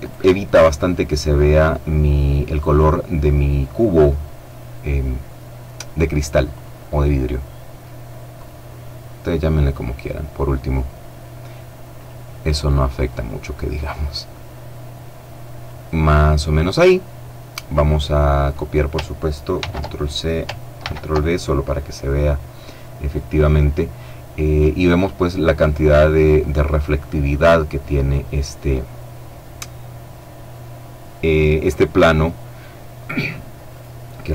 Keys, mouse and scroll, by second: 6.0 click, 7.7 click, 9.1 click, 11.3 click, 12.5 click, 19.0 ctrl+c, 20.2 ctrl+v, 33.1 right click.